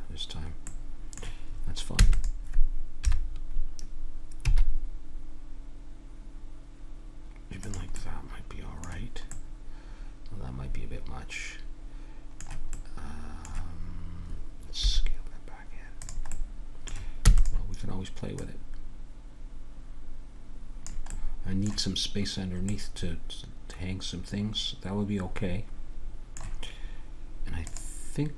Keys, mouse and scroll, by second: 0.8-3.0 middle drag, 1.9 e, 3.0 KP_7, 4.4 s, 8.0-12.7 middle drag, 13.5-14.8 middle drag, 14.8 s, 16.3 middle click, 17.2 e, 18.4-20.2 drag, 21.1-24.7 middle drag.